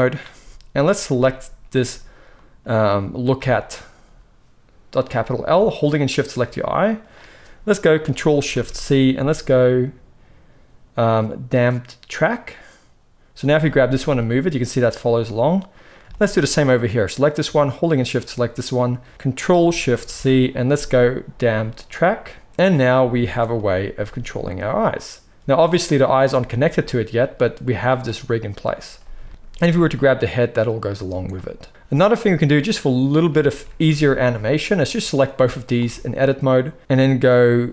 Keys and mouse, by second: 1.2-6.1 middle drag, 6.1 shift+click, 6.2-8.5 shift+middle drag, 8.5 ctrl+shift+c, 13.3 click, 13.9 g, 16.0 shift+middle click, 16.7 click, 17.8 shift+click, 20.0 ctrl+shift+c, 22.7 drag, 23.0 shift+middle click, 23.2 shift+click, 23.4-32.6 middle drag, 23.9 g, 26.5 g, 29.5 r, 32.6-34.9 drag, 33.8 alt+a, 34.9-37.7 middle drag.